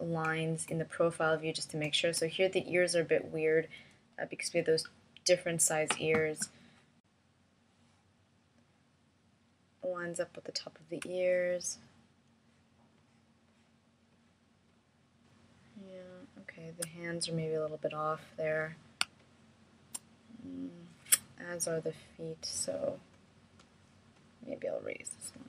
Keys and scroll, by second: 13.4 space, 21.4 space.